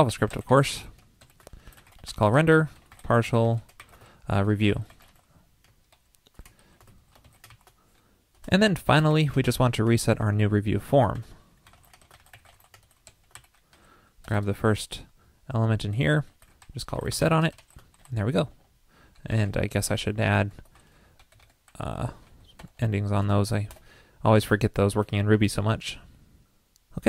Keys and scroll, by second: 19.5 super+Right, 23.2 super+Left, 23.3 super+1, 25.2 super+s.